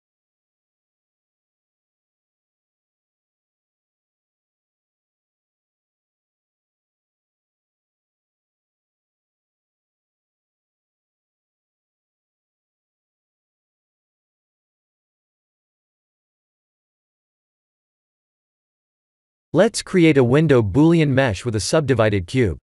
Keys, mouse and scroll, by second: 0.3 click, 1.0 g, 3.1 s, 6.1 click, 9.1 middle click, 10.0 middle click, 10.7 click, 11.9 click, 12.4 click, 12.7 middle click, 12.9 middle click, 15.0-15.4 scroll down 3, 15.5 click, 16.3 KP_1, 16.9 click, 17.2 shift+z, 18.1 shift+z, 18.6 click, 19.4 shift+z, 20.1 shift+z, 20.4 click, 21.1 shift+a.